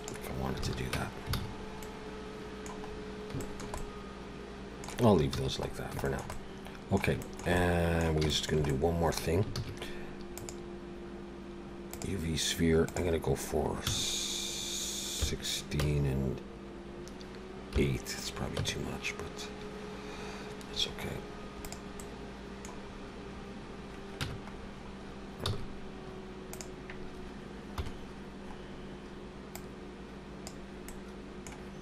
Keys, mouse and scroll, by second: 0.7 alt+a, 1.0 Tab, 1.4 alt+a, 1.5-2.1 scroll down 3, 1.8 middle click, 2.9-3.3 scroll up 3, 3.4 shift+middle click, 3.8 middle click, 5.4 ctrl+s, 5.7 scroll down 2, 6.0 shift+middle click, 6.3 middle click, 7.2 shift+middle click, 7.6 middle click, 8.3 shift+middle click, 8.7 middle click, 9.5 shift+a, 12.9 click, 22.0 middle click, 23.4-24.0 scroll up 2, 24.2 Tab, 24.5-25.0 scroll down 3, 25.5 s, 27.7 KP_7, 28.6-29.3 scroll up 2, 29.5 click, 30.9 middle click.